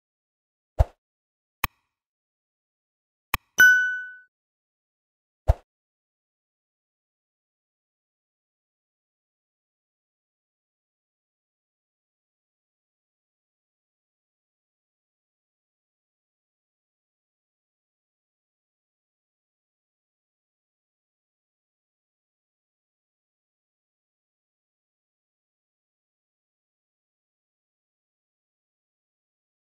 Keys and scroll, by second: 0.9 ctrl+z, 9.7 ctrl+x, 9.9 ctrl+alt+v, 14.3 ctrl+z.